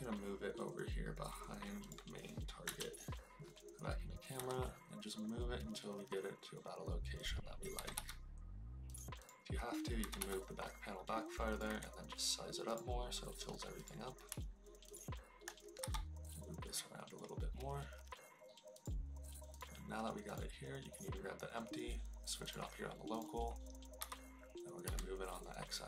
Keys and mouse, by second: 2.6 KP_0, 4.3 g, 7.7 g, 8.0 y, 8.9 drag, 9.9 g, 10.1 y, 11.4 click, 11.6 s, 12.6 click, 14.8 shift+click, 15.8 g, 22.4-23.5 drag, 23.9 g, 24.8 x.